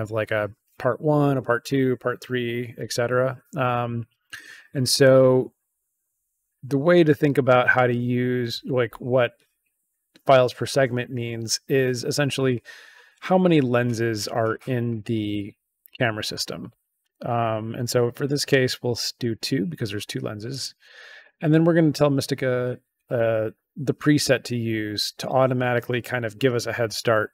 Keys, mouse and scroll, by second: 20.4 click, 21.1 click.